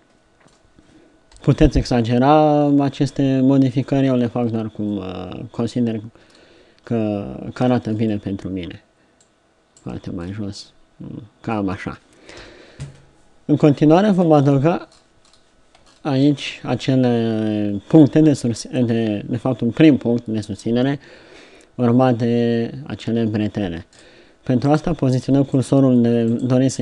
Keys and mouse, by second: 1.3 KP_3, 7.7 Tab, 7.9 middle click, 9.2 click, 10.0 Tab, 12.4 KP_7, 15.6-26.8 middle drag.